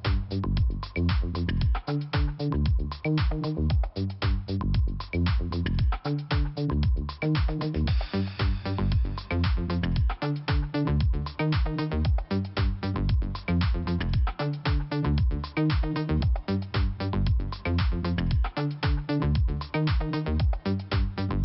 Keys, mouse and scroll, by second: 1.5 click, 1.6 click, 3.0 click, 3.9 click, 4.0 click, 6.4 click, 6.5 click, 16.6 click, 16.7 click, 18.2 click, 21.1 click, 21.3 click.